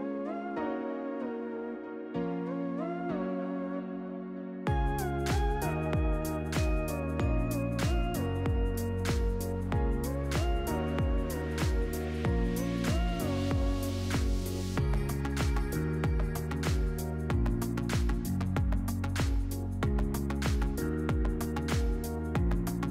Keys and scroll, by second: 13.5-14.8 typing, 19.9 ctrl+v.